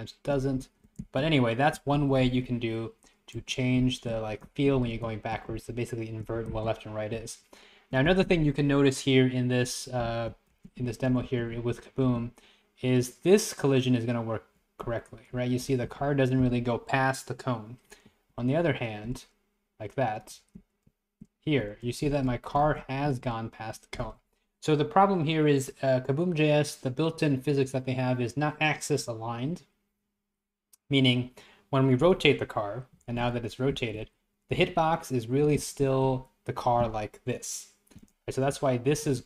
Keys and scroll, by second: 0.6 Right, 1.3 Left, 1.3 Right, 2.0 Left, 2.3 Right, 3.4 Left, 3.9 Right, 4.5 Left, 4.8 Right, 5.1 Left, 5.6 Right, 6.6 Left, 7.2 Right, 10.1 Left, 10.3 Up, 10.9 Right, 11.3 Left, 12.1 Left, 14.9 Up, 15.4 Up, 15.9 Up, 18.4 Down, 18.4 Right, 20.4 Up, 20.4 Left, 21.0 Right, 22.1 Up, 22.1 Right, 22.6 Left, 22.7 Up, 23.1 Up, 33.0 Down, 33.0 Left, 33.8 Up, 33.8 Right, 34.6 Right, 34.6 Up, 35.5 Up, 35.6 Left, 36.0 Right, 38.6 Up, 39.1 Up.